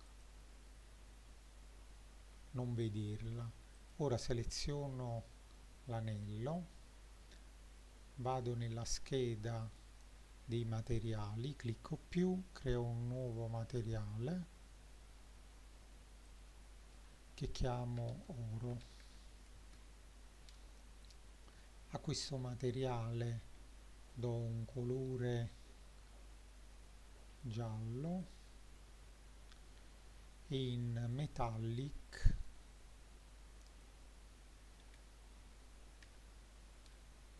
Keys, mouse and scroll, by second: 0.1 click, 2.2 n, 3.0 middle click, 3.8 click, 9.6 click, 11.6 click, 13.3 click, 16.3-19.6 drag, 24.1 click, 28.2 click, 29.2-30.0 scroll down 1, 31.2-36.1 drag.